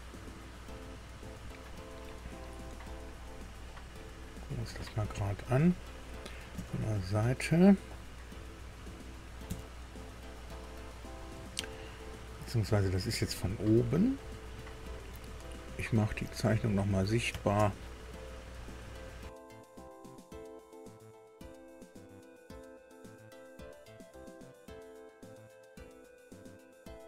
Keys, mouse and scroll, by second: 3.2 scroll up 2, 3.7-4.8 middle drag, 5.1 shift+middle click, 6.5 KP_1, 9.4 KP_2, 11.2-11.8 scroll up 2, 13.9 middle click, 16.0 click, 16.8 click, 17.3 space, 18.2 scroll down 2, 18.5-20.8 drag, 22.4 scroll down 1, 24.3 space, 25.1 click, 25.9 space, 26.7 space.